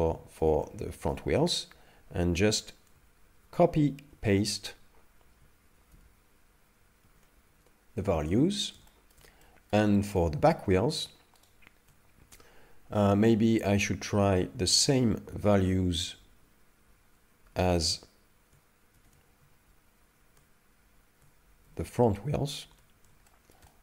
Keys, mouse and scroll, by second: 0.6 shift+middle click, 3.4 ctrl+c, 4.2 ctrl+v, 5.9 ctrl+c, 7.1 ctrl+v, 8.0 shift+middle click, 8.5-8.9 scroll down 2, 8.9 shift+middle click, 9.4 middle click, 9.9 shift+middle click, 11.5 shift+right click, 14.7 ctrl+c, 15.6 ctrl+v, 17.4 ctrl+v, 19.0 ctrl+c, 19.7 ctrl+v, 21.7 ctrl+c, 22.6 ctrl+v, 23.3 shift+middle click, 23.7 middle click.